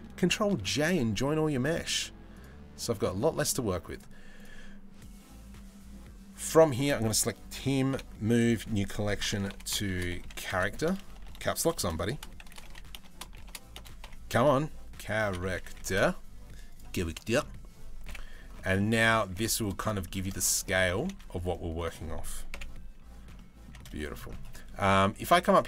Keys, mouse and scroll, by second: 0.3 ctrl+j, 2.0 click, 3.6-6.1 drag, 7.5 m, 10.0 a, 10.7 BackSpace, 11.2 BackSpace, 16.7 right click, 17.7 KP_7, 18.4 middle click, 18.8 g, 19.6 shift+middle click, 20.5 g, 22.1 KP_7, 23.0-23.3 middle drag, 25.0-25.6 drag.